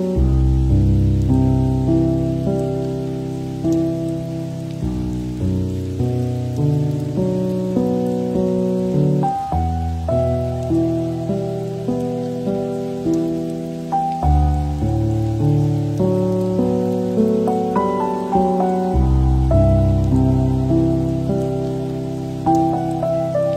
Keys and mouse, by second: 0.0 click, 0.9 g, 2.0 click, 2.5 g, 4.1 click, 4.4 g, 5.8 ctrl+r, 6.5 g, 8.9 click, 9.4 g, 11.8 shift+middle click, 12.2 Tab, 13.9 shift+middle click, 16.0 shift+middle drag, 16.5 click, 16.7 Tab, 17.5 alt+z, 18.6 g, 19.4 Tab, 19.8 click, 20.4 shift+middle click, 23.2 middle click, 23.4 shift+middle drag.